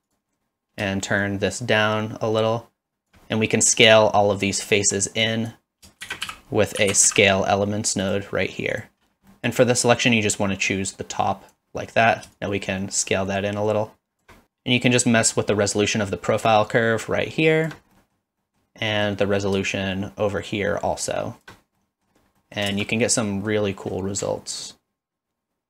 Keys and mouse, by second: 1.1-3.1 shift+drag, 4.7 shift+middle click, 5.2 click, 6.0 shift+a, 9.3 middle click, 10.2-11.5 drag, 12.4-14.3 shift+drag, 14.4 click, 16.6-17.7 shift+drag, 17.9 middle click, 18.5 middle click, 18.8 middle click, 19.9-21.5 shift+drag, 21.9 middle click, 22.4 middle click, 22.7 space, 23.0 middle click.